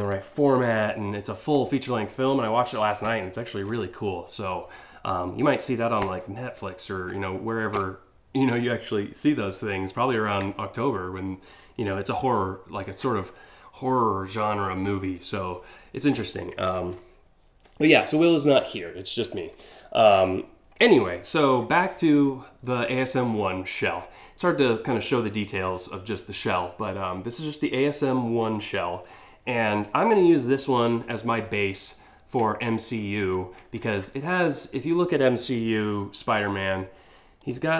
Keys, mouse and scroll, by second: 37.0 click.